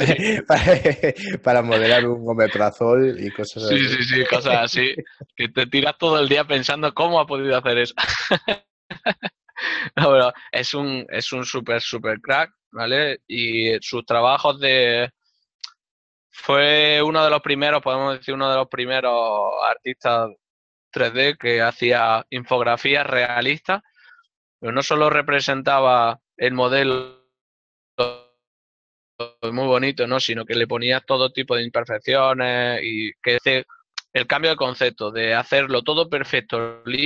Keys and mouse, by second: 15.3 middle click, 17.5 ctrl+middle click, 18.5 shift+middle click.